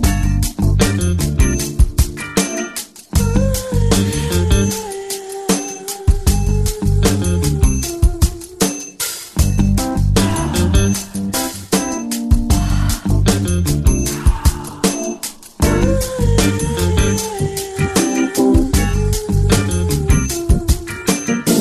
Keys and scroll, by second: 2.2 space, 8.7-10.3 typing, 12.1 ], 12.2 ], 12.7 ], 15.1 ctrl+z.